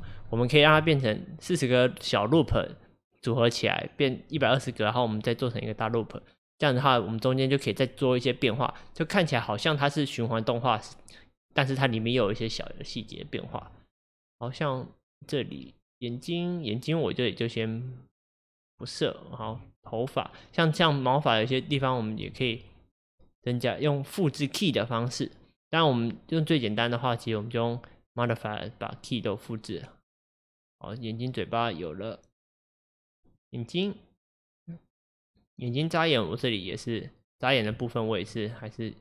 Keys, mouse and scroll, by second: 33.4 click, 35.8 click, 36.3 click, 37.4 click, 38.4 shift+click.